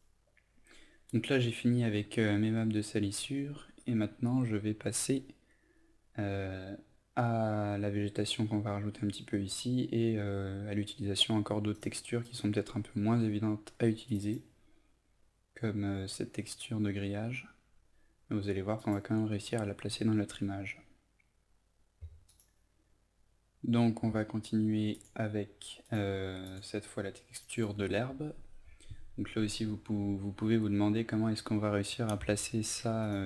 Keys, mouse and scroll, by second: 21.4 F11, 21.9 click.